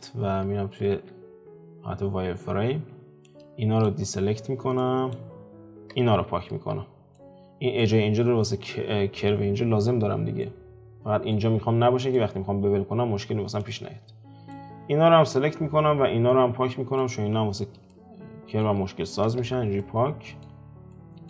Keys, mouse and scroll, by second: 0.9 z, 3.2 ctrl+click, 4.8-5.9 ctrl+drag, 5.9 x, 6.6 z, 7.1-10.1 middle drag, 10.4-13.6 middle drag, 13.6 alt+click, 14.1 scroll down 3, 14.5-17.2 middle drag, 17.2-17.9 scroll up 1, 17.9-19.2 shift+middle drag, 19.2 x, 19.8-21.2 middle drag.